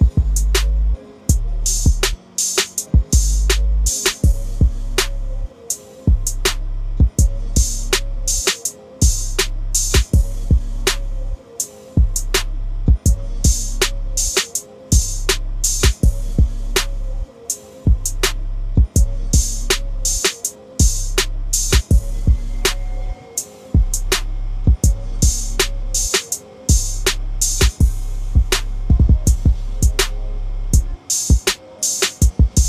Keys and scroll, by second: 13.9 shift+BackSpace, 15.6 Return, 18.6 shift+BackSpace, 19.2 Return, 23.0 shift+BackSpace, 23.9 Return, 28.1 shift+BackSpace.